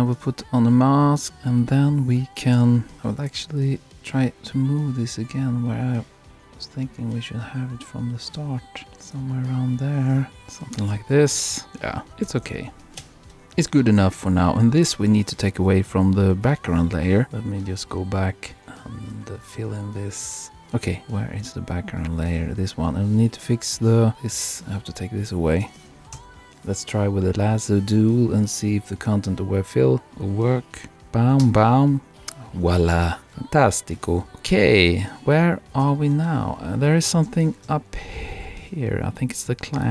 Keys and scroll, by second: 8.8 super+Right, 10.9 super+-, 31.0 shift+BackSpace, 31.4 shift+Return, 33.0 super+-, 35.8 super+-.